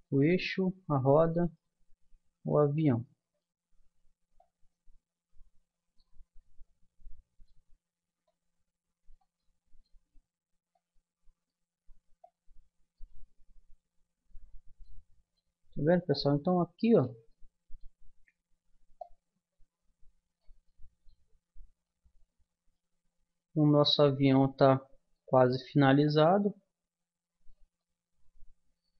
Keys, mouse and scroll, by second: 3.0-6.0 middle drag, 6.2-8.2 middle drag, 8.2 click, 9.9 middle click, 14.8-16.1 middle drag, 19.1-20.3 middle drag, 20.6-23.9 middle drag, 24.3-27.8 drag, 27.8 middle click.